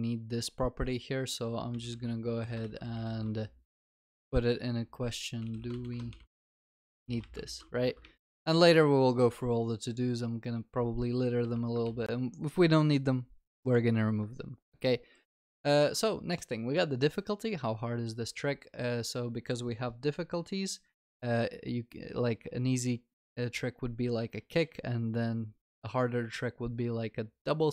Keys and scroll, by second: 7.5 ctrl+s, 11.9 ctrl+s.